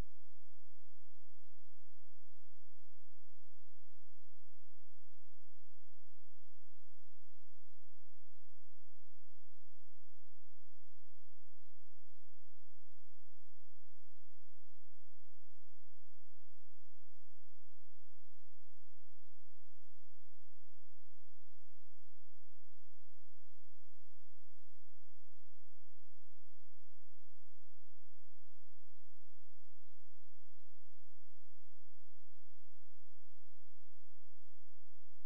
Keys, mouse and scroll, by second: 1.2-1.6 scroll down 1, 1.6-2.6 scroll up 1, 2.6 click, 7.2-7.6 scroll down 1, 8.0 scroll up 1, 8.6 space, 8.9 click, 9.5 scroll down 1, 10.2 click, 11.6-12.6 scroll up 1, 12.6 click, 16.1 F12, 19.2 click, 26.4 click, 29.4 right click, 30.0 click, 30.8-31.2 scroll down 1, 31.2-31.7 scroll up 1, 32.2 scroll down 1, 32.4-33.5 scroll up 1, 33.5-35.2 scroll down 1.